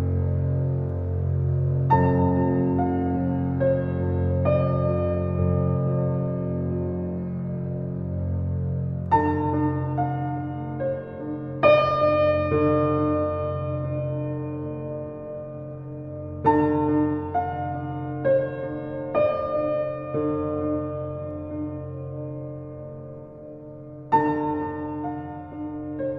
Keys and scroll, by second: 0.2 alt+], 3.9 ctrl+d, 12.0 u, 22.4 KP_Subtract, 22.9 4, 23.1 5, 23.7 Return.